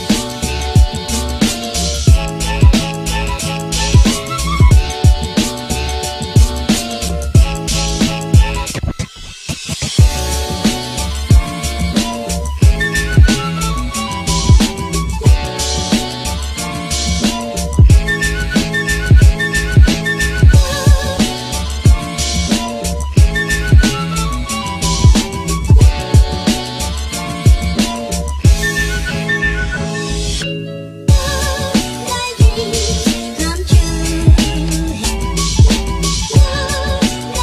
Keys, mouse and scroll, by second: 0.3 space, 3.2 space, 7.2 space, 13.0 space, 26.8 space, 27.3 ctrl+-, 27.9 ctrl+m.